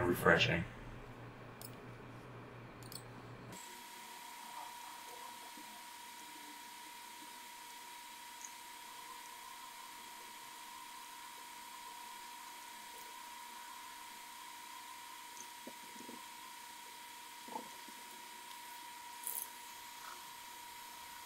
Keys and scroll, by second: 1.1 typing, 2.9-3.6 typing, 9.1-10.1 typing, 12.1 typing, 13.0 ctrl+z, 13.0 ctrl+x, 18.0-19.8 typing.